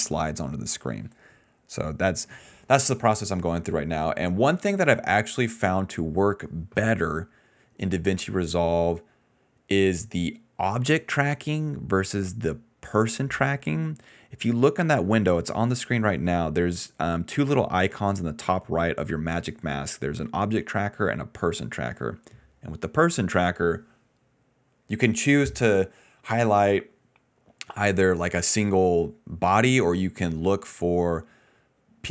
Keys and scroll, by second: 11.3 ctrl+s, 15.7-16.5 typing, 25.0-30.0 typing.